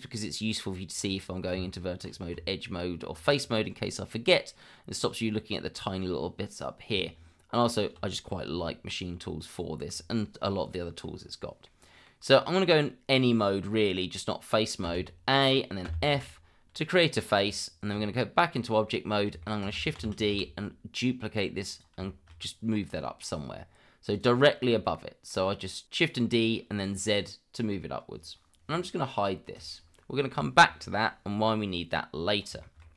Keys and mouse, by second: 1.5 Tab, 6.9 Tab, 11.7-12.0 middle drag, 14.8 a, 15.8 f, 17.4 Tab, 18.9 middle drag, 19.4 shift+middle drag, 20.0 shift+d, 20.3 z, 22.1 shift+middle drag, 24.1 click, 25.0 middle drag, 29.5 click, 32.0-32.4 middle drag, 32.6 shift+middle drag.